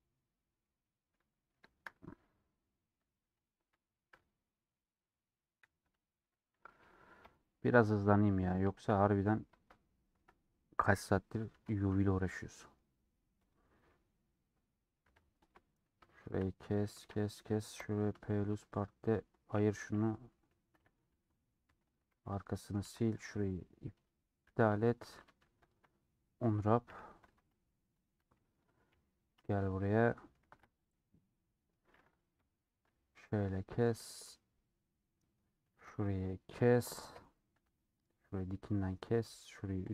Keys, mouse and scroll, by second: 1.9 scroll up 2, 2.1-3.2 middle drag, 3.2 3, 3.3-4.7 drag, 4.7-6.3 middle drag, 6.3 alt+click, 7.3 ;, 8.1 3, 8.2-10.5 middle drag, 10.5 scroll up 1, 11.6 2, 12.4-13.6 middle drag, 13.6 click, 13.8-15.0 middle drag, 15.0 2, 15.9-17.0 middle drag, 17.0 a, 18.7 Tab, 19.0 click, 19.9 /, 20.3 /, 20.5 middle click, 21.2 Tab, 21.3 middle click, 21.8 3, 22.5 middle click, 22.9 2, 23.1 alt+click, 24.5 ctrl+x, 24.7 middle click, 25.2 a, 26.0 middle click, 26.8 /, 27.3 Tab, 28.2 middle click, 28.9 /, 29.2 middle click, 29.6 Tab, 29.8 middle click, 30.5 3, 30.7 alt+click, 31.0-32.5 middle drag, 32.5 ;, 32.7-34.1 middle drag, 34.1 3, 34.9 scroll up 2, 35.1-36.2 middle drag, 37.2 ;, 37.6 2, 38.5-39.9 middle drag.